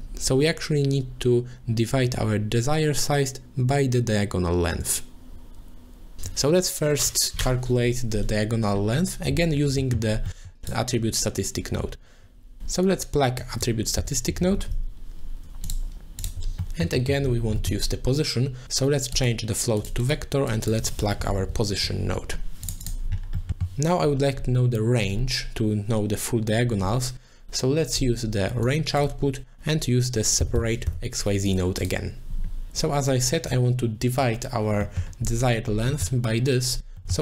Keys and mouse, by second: 9.8 middle click, 10.3 middle click, 10.7 click, 13.4-15.7 drag, 14.4 t, 16.2 click, 16.8 middle click, 17.0 middle click, 17.6 middle click, 19.1 click, 20.0 click, 20.5-22.7 drag, 21.3 p, 22.9 click, 23.4 middle click, 28.6-31.6 drag, 31.8 click, 33.5 click, 36.1 middle click, 37.0 middle click.